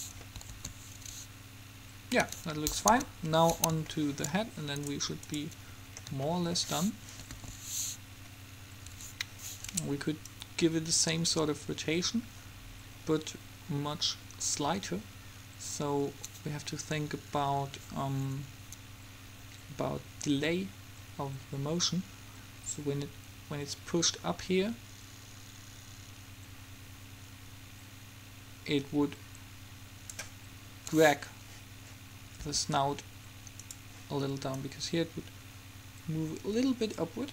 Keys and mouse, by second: 0.6 alt+a, 2.4 Escape, 3.0 KP_3, 7.5 alt+a, 9.0 Escape, 30.9-33.0 middle drag, 32.6 r, 34.6-36.5 drag.